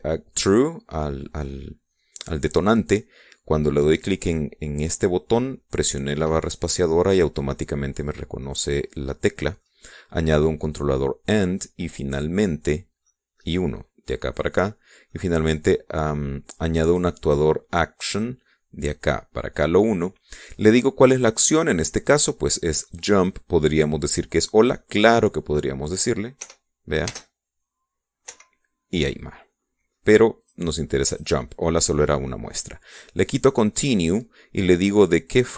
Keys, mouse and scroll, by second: 9.5-10.8 middle drag, 12.6 middle click, 14.1 middle click, 15.7 click, 17.9 click, 19.2 click, 21.1 click, 22.9 click, 25.1 click, 27.4 p, 28.2 space, 29.4 Escape, 31.5 click, 32.2 click.